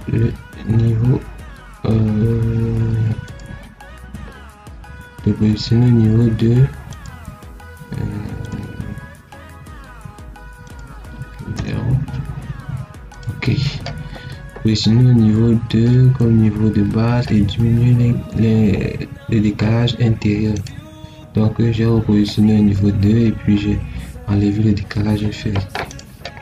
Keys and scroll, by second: 11.4 0.